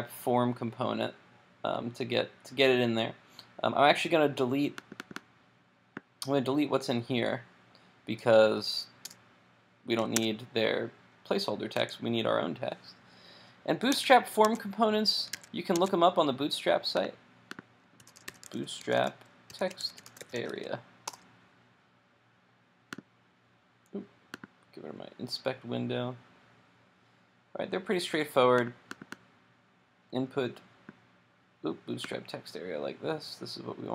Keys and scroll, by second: 13.9 super+Tab, 15.5 super+Tab.